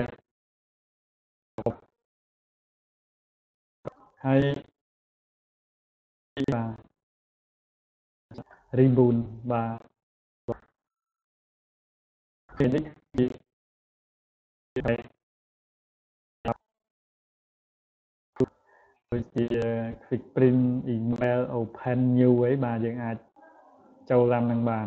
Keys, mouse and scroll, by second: 6.7-9.8 drag.